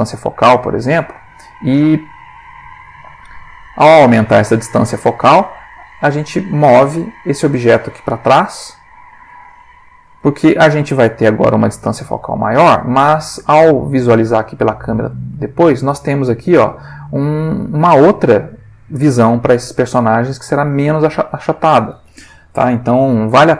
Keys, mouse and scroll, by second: 2.6 click, 3.3-4.1 ctrl+middle drag, 6.5 g, 9.1 shift+click, 9.8 ctrl+shift+middle click, 10.5 ctrl+g, 12.2 click, 14.1 click, 15.4-16.2 ctrl+middle drag, 20.9 click, 22.5 1, 22.9 5, 23.0 0, 23.3 Return.